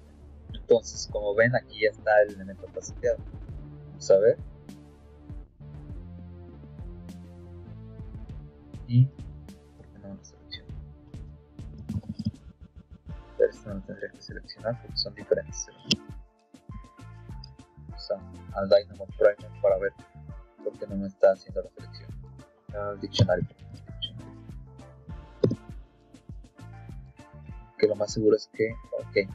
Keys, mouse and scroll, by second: 1.2 click, 5.0-6.2 drag, 10.4 click, 12.8 click, 16.6 Tab, 20.8 click, 21.8 click, 22.8-24.1 typing, 24.7 Down, 25.0 Down, 25.3 Return.